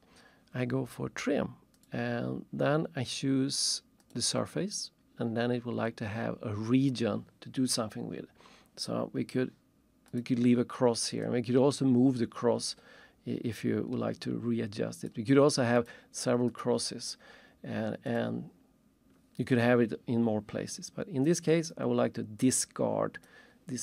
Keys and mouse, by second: 1.7 click, 4.0 click, 10.1 click, 11.2 click, 15.1 click, 16.5 click, 21.7 click, 23.3 click.